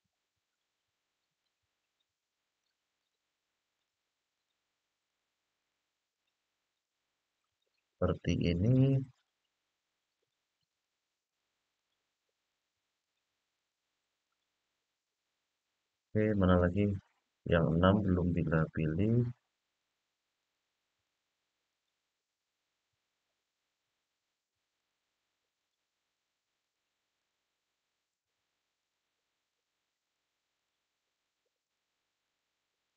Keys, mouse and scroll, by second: 0.3 middle click, 2.2 shift+click, 2.7 shift+click, 3.5 shift+click, 4.1 shift+click, 4.8 shift+click, 5.3 shift+click, 5.9 shift+click, 6.5 shift+click, 7.2 shift+click, 7.7 shift+click, 8.3 shift+click, 8.8 shift+click, 9.9 shift+click, 10.4 shift+click, 11.0 shift+click, 11.5 shift+click, 12.2 shift+click, 12.7 shift+click, 13.3 shift+click, 14.0 shift+click, 14.8-16.5 middle drag, 17.3 shift+click, 18.1 shift+click, 18.8 shift+click, 19.5 shift+click, 20.1 shift+click, 20.8 shift+click, 21.4 shift+click, 24.5 shift+click, 25.3 shift+click, 25.9 shift+click, 26.3 shift+click, 26.9 shift+click, 27.8 shift+click, 28.5 shift+click, 29.2 shift+click, 29.7 shift+click, 30.3 shift+click, 30.9 shift+click, 31.4 shift+click, 32.0 shift+click, 32.6 shift+click.